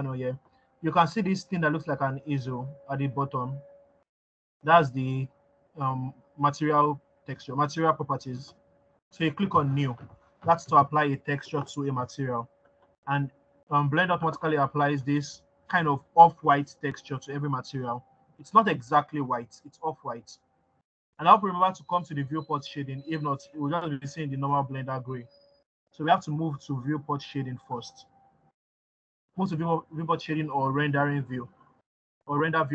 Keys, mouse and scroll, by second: 15.2 click, 18.8-20.8 scroll down 1.